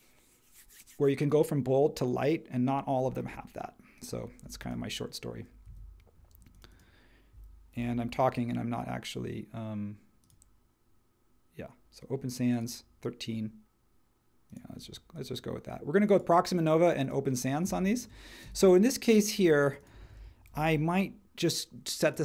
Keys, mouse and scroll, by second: 4.4 space, 5.6 super+z, 6.4 space, 7.7 super+t, 20.0 super+a, 20.5 super+t.